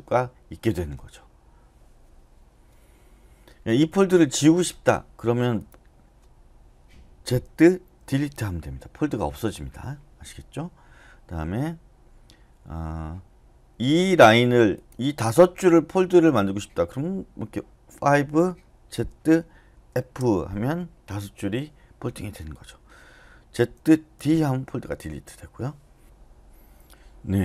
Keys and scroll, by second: 7.4-8.0 typing, 17.8-19.9 typing, 23.5-24.2 typing.